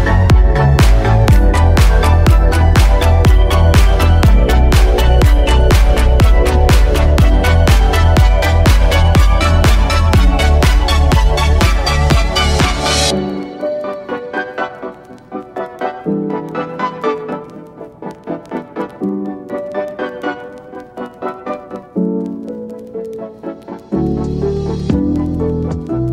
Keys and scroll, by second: 5.1 super+z, 12.7 space, 13.7 space.